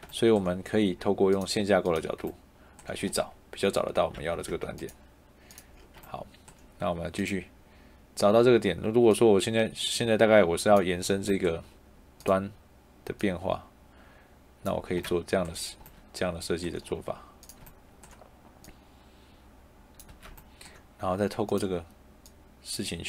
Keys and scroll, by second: 4.0 Tab, 14.8 Escape, 20.0 Escape.